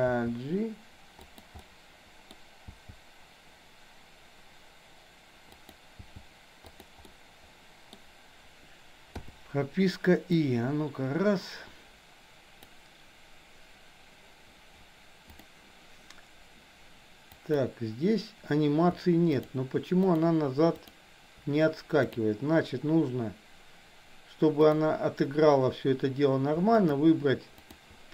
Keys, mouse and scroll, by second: 0.1 g, 1.6 middle click, 2.8 g, 6.0 g, 7.0-8.0 middle drag, 9.1 i, 10.5-12.8 drag, 17.4 click, 19.4 shift+click, 20.0 shift+click, 20.9 shift+click, 22.0 click, 24.6 click, 26.8 shift+click, 27.6 shift+click.